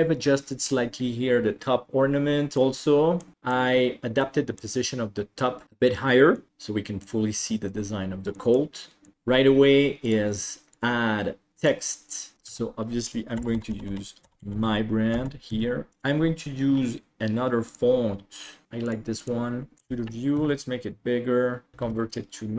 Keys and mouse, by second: 2.7-3.3 middle drag, 4.3-4.8 middle drag, 5.5 middle drag, 6.4 middle click, 7.1-7.6 middle drag, 8.4 middle click, 9.1 middle click, 9.1 KP_7, 10.1 click, 10.8-11.8 drag, 12.6 Tab, 13.4-15.6 typing, 14.6 ctrl+v, 15.9 Tab, 15.9 click, 18.6 ctrl+s, 18.9-19.8 drag, 19.8 shift+middle click, 19.8 shift+KP_1, 20.6 s, 21.8 alt+c.